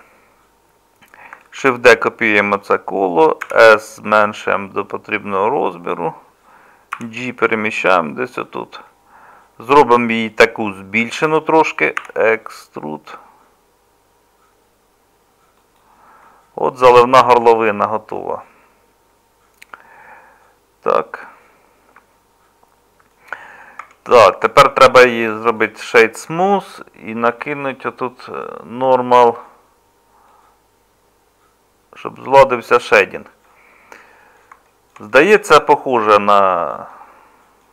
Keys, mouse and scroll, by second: 1.6 shift+d, 3.4 s, 7.0 g, 12.0 e, 23.8 Tab.